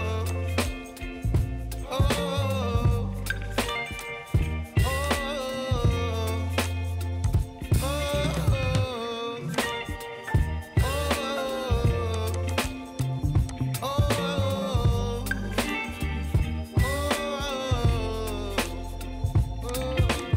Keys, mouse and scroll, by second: 0.3 click, 1.2 scroll up 1, 4.0 click, 6.6-9.5 drag, 12.1-14.4 drag, 14.4-15.6 scroll down 7, 15.6-19.7 middle drag, 19.7-20.3 drag.